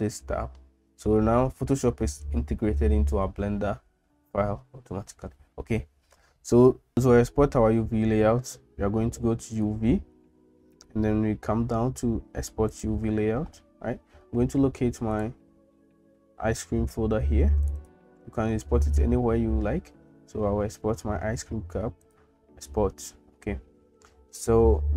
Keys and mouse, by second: 9.6-13.3 drag.